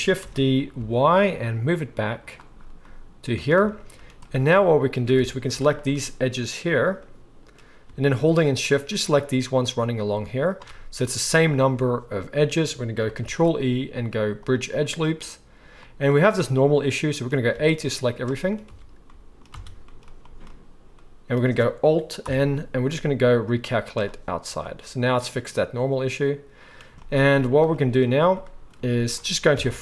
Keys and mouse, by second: 0.2 shift+d, 2.2-3.4 drag, 3.4 shift+right click, 3.8-5.9 drag, 5.2 alt+a, 5.9-7.8 right drag, 8.2-9.7 shift+middle drag, 10.0 shift+middle click, 13.2 ctrl+e, 16.1 right click, 16.1-22.3 middle drag, 20.1 a, 22.2 alt+n, 22.3-28.5 drag, 28.5 right click, 28.8-29.8 shift+drag, 29.5 KP_1.